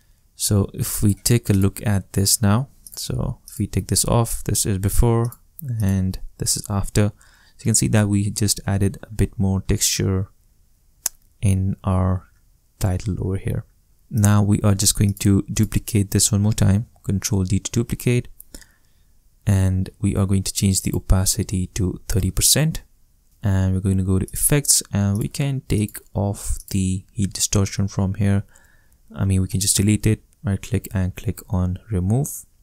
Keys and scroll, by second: 16.7 super+d, 21.3 3, 21.8 0, 22.1 Return.